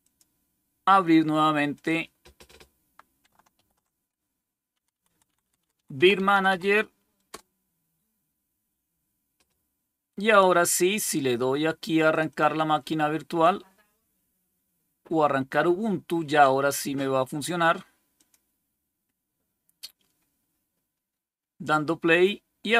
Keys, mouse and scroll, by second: 1.6 click, 3.4 alt+super+d, 4.6 Down, 4.8 Down, 5.0 Down, 5.2 Down, 5.3 Down, 5.6 Down, 5.8 Down, 6.0 Down, 6.2 Down, 6.4 Down, 7.2 Return, 12.0 click, 18.0 click.